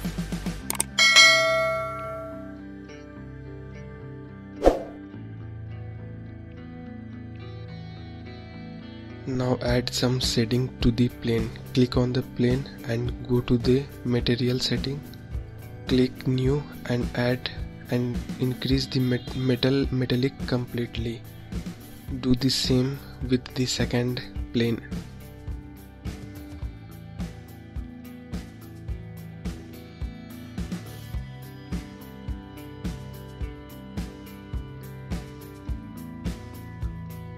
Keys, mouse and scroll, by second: 0.0-1.3 scroll up 4, 1.3-1.7 scroll down 1, 1.7-2.9 scroll up 1, 2.9-3.3 scroll up 1, 3.3-6.7 drag, 7.5-8.2 scroll up 4, 8.6 click, 9.8-11.5 drag, 11.5-13.5 scroll down 4, 13.5-16.5 drag, 16.7 scroll up 1, 17.0-18.9 scroll down 2, 18.9-19.6 scroll down 1, 19.6 click, 21.5 click, 24.5-27.5 drag, 28.2-29.6 scroll down 5, 30.3-32.4 drag, 33.6-33.9 scroll up 2, 34.1 scroll down 3, 37.1-37.3 scroll down 2.